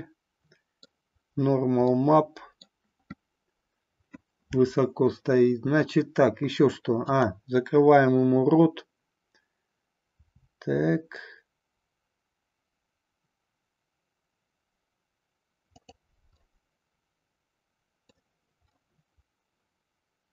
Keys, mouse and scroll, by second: 2.0 middle click, 2.6 scroll down 1, 7.0-9.6 drag, 10.3 r, 16.0 click, 16.5-18.2 middle drag, 18.7-20.3 middle drag.